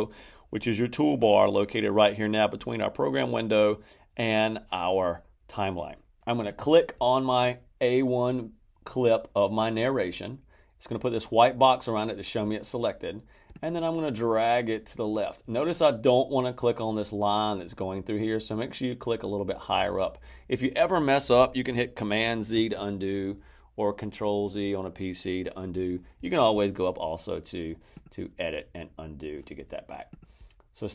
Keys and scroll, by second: 22.5 super+z.